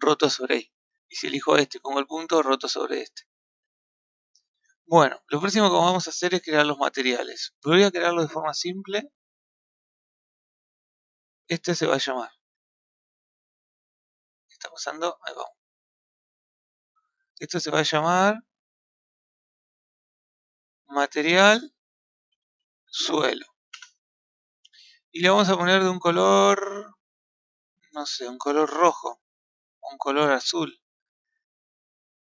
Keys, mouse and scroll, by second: 0.0-1.0 scroll down 18, 1.0 click, 1.6 KP_Decimal, 2.1 scroll down 1, 2.2-3.4 middle drag, 3.4 scroll up 1, 3.7-7.8 middle drag, 9.1 click, 11.2 click, 14.5-16.0 middle drag, 16.3 scroll down 4, 16.7-17.1 scroll up 3, 17.1-19.3 scroll down 1, 19.3-21.1 middle drag, 21.1-24.1 drag, 27.2 click, 28.1 click.